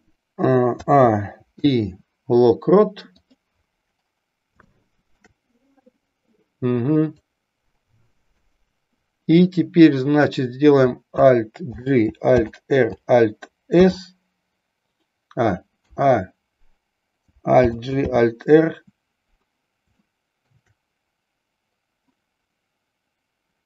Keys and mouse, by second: 4.7-5.2 shift+middle drag, 7.7 click, 20.1-20.6 shift+middle drag.